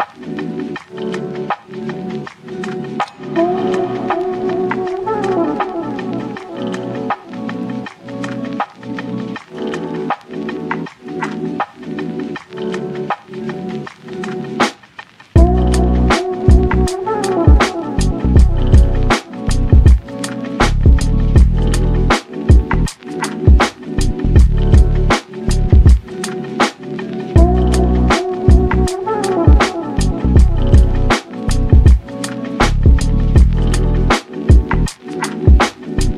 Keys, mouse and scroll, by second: 0.3 ctrl+s, 0.6-2.6 shift+middle drag, 2.6 click, 3.1 drag, 4.8 shift+middle click, 5.2 ctrl+s, 5.3 click, 6.0 click, 6.4 s, 7.5 drag, 8.8 click, 9.4-11.2 drag, 11.6 click, 12.4-14.4 drag, 16.0 ctrl+s, 16.5 shift+a, 18.1 ctrl+alt+KP_0, 19.0 ctrl+b, 20.2 click, 22.2 KP_0, 23.0 KP_0, 24.3 n, 25.4 click, 25.5 n, 25.8 scroll down 1, 26.1-30.6 middle drag, 30.6 click, 31.5-32.5 drag, 32.5-33.8 shift+middle drag, 33.8 n, 34.2 click, 34.4 n, 35.2 ctrl+s.